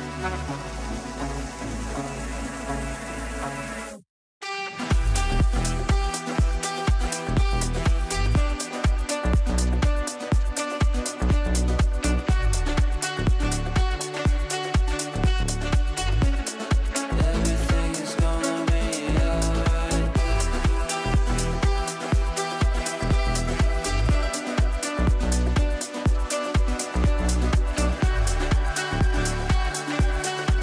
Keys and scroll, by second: 2.0 g, 29.6 Delete.